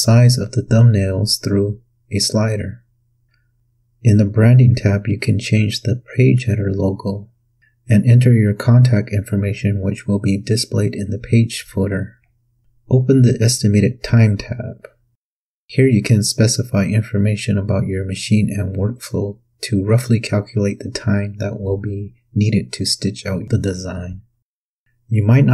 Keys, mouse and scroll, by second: 0.5-3.6 drag, 5.3 click, 10.8 click, 15.2 click, 22.1 click, 23.8 KP_4.